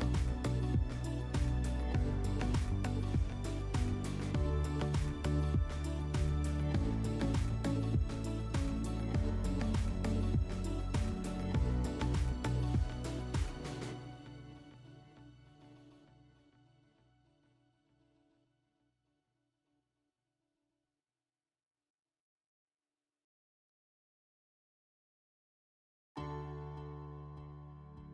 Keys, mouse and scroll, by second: 1.3-2.4 drag, 5.2 middle click, 7.1 click, 8.3 ctrl+click, 10.3 alt+middle click, 11.0 middle click, 11.9 alt+middle click, 12.6 middle click, 13.8 ctrl+click, 15.0 ctrl+click, 15.1 ctrl+click, 16.7 click, 18.4 click, 19.7 click, 20.2 click, 22.0 alt+middle click, 22.6 F4, 23.9 alt+middle click, 27.8 alt+middle click.